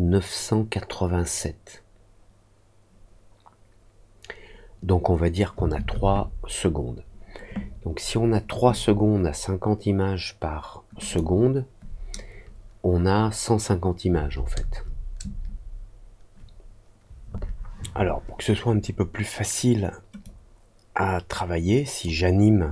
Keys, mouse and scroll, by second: 11.0 click, 20.2-21.9 drag.